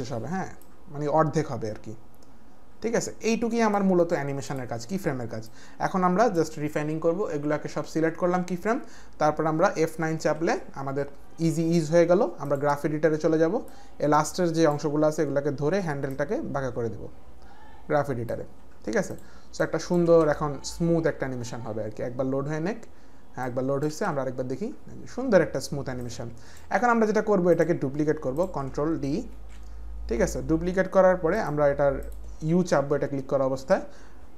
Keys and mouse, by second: 0.6 click, 5.5 click, 13.7 click, 16.1 click, 19.0 click, 19.6 click, 20.0 space, 23.2 space, 23.4 click, 23.9 space, 26.0 click, 27.6 click, 27.6 space, 28.3 click, 29.3 ctrl+d, 31.3 click, 32.9 u.